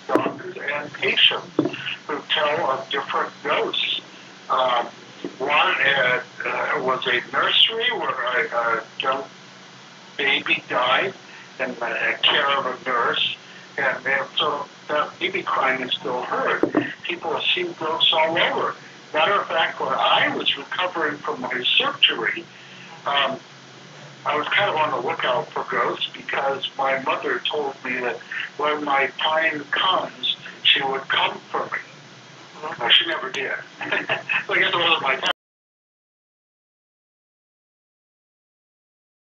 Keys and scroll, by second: 5.9 w, 9.4 w, 11.4 n, 14.9 w, 17.3 a, 34.4 Escape.